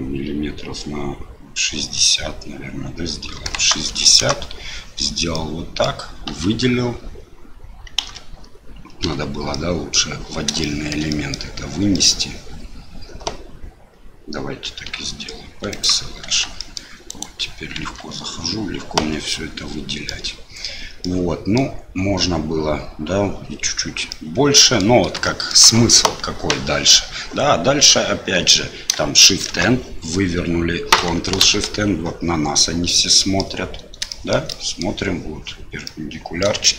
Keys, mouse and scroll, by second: 5.3 middle click, 6.3 a, 8.0 alt+a, 9.0 l, 9.7 middle click, 10.7 shift+middle click, 11.3 middle click, 12.0 middle click, 13.8 l, 14.9 p, 16.2 Tab, 16.6 middle click, 17.1 click, 17.8 Tab, 19.0 a, 19.3 click, 21.0 middle click, 24.1 middle click, 25.3 shift+click, 29.4 shift+n, 31.4 ctrl+shift+n, 32.8 click, 33.0 middle click, 34.1 shift+middle click, 34.5 middle click, 35.8 middle click, 36.6 shift+middle click.